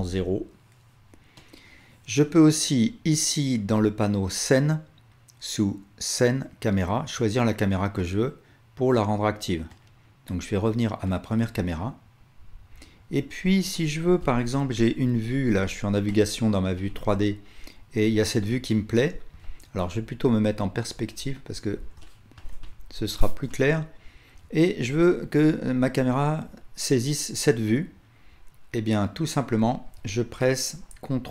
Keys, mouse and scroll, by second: 4.3 click, 7.2-19.8 drag, 20.9 KP_5, 21.9 alt+click, 25.2-31.3 drag.